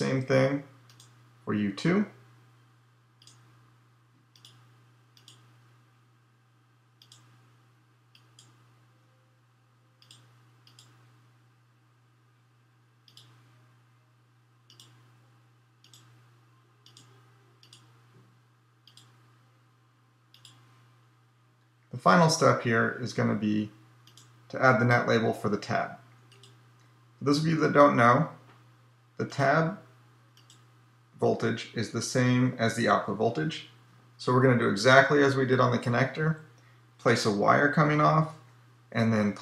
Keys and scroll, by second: 38.3 p.